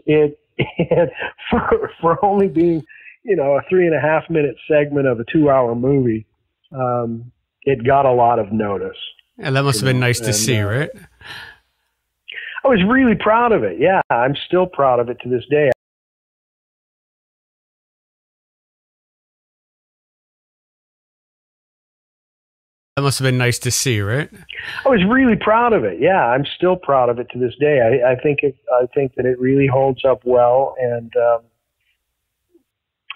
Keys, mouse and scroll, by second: 0.5 click, 1.3-2.6 drag, 3.3 click, 4.1 click, 5.1 ctrl+s, 5.8 click, 6.7 click, 12.8-13.9 drag, 14.0 Delete, 15.1 click, 15.7 space, 15.9 click, 16.7 click, 17.1 click, 17.5 click, 18.2 click, 19.2 Delete, 19.5 click, 20.3-21.9 drag, 22.3 click, 22.8 click, 22.9 space, 23.8 click, 25.3 click, 26.2 click, 26.8-29.1 drag, 29.5 click, 30.5 click, 31.5 click.